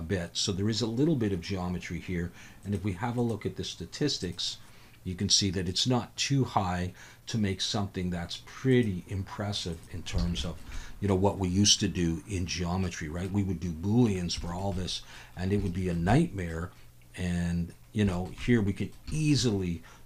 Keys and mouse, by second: 3.2-4.4 drag, 8.8-9.8 drag, 10.4 alt+shift+a, 10.4 shift+drag, 10.7-11.1 drag, 12.9-13.3 middle drag, 14.4 shift+middle drag, 14.7-15.1 middle drag, 15.7 shift+middle drag, 16.1 middle click, 18.1 shift+middle click, 18.4-18.9 middle drag, 19.1 shift+middle click.